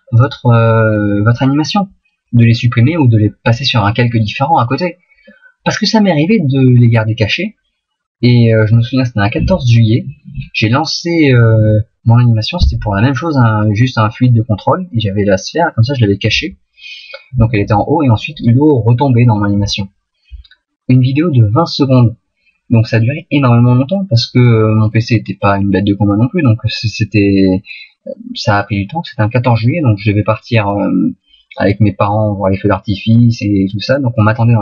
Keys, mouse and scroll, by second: 0.2 click, 5.8 middle click.